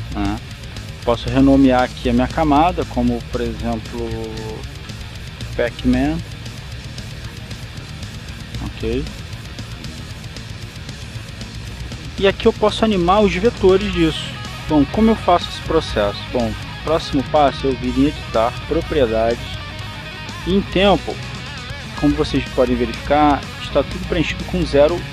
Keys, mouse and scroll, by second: 1.7 click, 6.4-8.7 typing, 10.9 click, 11.6 click, 18.2 click, 20.0 click, 21.2 click.